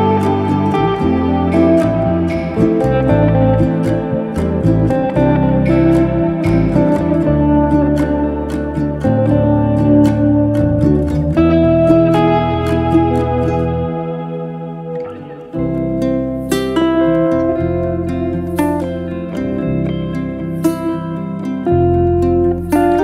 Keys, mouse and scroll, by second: 7.2 r, 14.6-16.1 shift+middle drag, 17.1 click, 17.7 shift+d, 18.4 click.